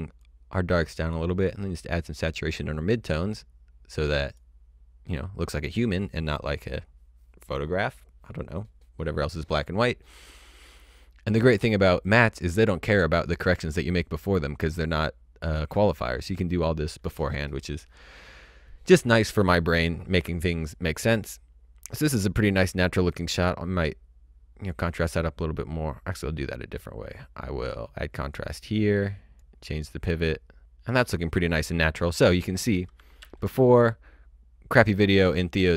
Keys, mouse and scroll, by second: 0.2 click, 12.1 click, 23.1-24.1 scroll up 1, 24.1-24.6 scroll down 1, 26.2-26.8 scroll down 1, 26.8-27.2 scroll up 1, 28.0 click, 33.1 d.